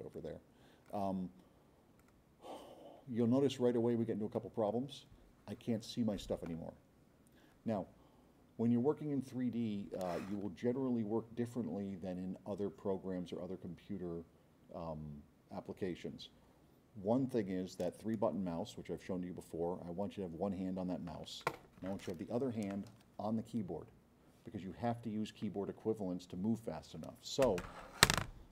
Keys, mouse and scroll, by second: 0.1-0.9 drag, 2.0 click, 3.8-4.8 drag.